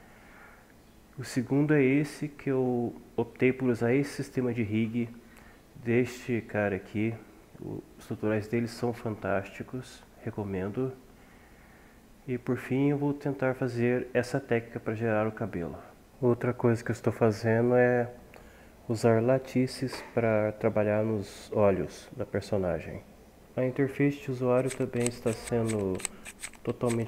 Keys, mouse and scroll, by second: 11.3 ctrl+z, 12.1 ctrl+z, 12.4 ctrl+z, 14.8 Tab, 15.0 g, 15.5 Tab, 15.6 g, 16.0 Tab, 16.0 g.